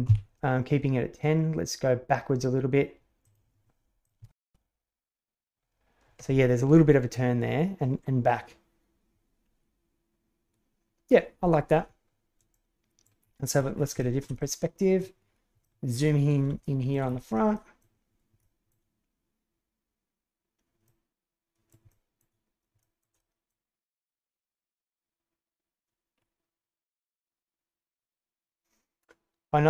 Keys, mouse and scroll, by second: 4.0 click, 4.2 shift+space, 12.5-13.0 middle drag, 13.9 shift+middle drag, 14.3-15.0 middle drag, 15.6 shift+middle drag, 16.6-16.9 shift+middle drag, 17.5 middle click, 18.4 shift+middle click, 20.8-21.6 middle drag, 21.8-22.2 shift+middle drag, 22.8 shift+middle click, 23.1 middle click.